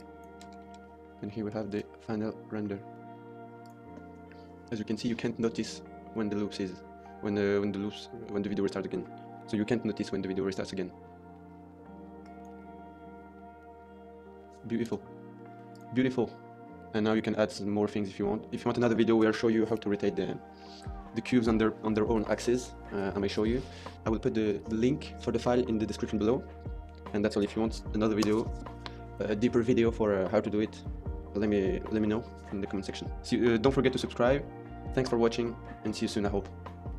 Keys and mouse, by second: 0.1 ctrl+s, 0.1 KP_0, 0.5 shift+middle click, 1.3 shift+middle click, 1.7 space, 2.5-3.5 middle drag, 3.5 click, 12.1 click, 14.7 space.